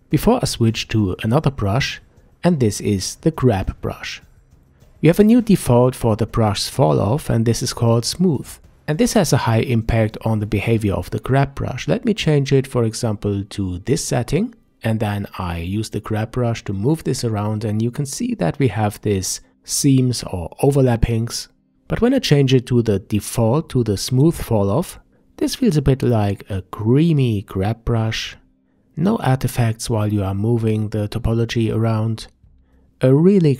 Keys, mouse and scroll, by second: 1.7-2.6 middle drag, 2.6 ctrl+s, 6.4 click, 8.6-11.6 drag, 13.5 f, 14.8-17.8 drag, 19.7 ctrl+z, 21.5-24.6 drag, 25.1 f, 26.4-27.9 drag, 27.9-28.7 middle drag, 28.7-31.1 drag, 31.1-31.9 middle drag, 31.9 click, 32.1 middle click, 32.5-33.5 drag.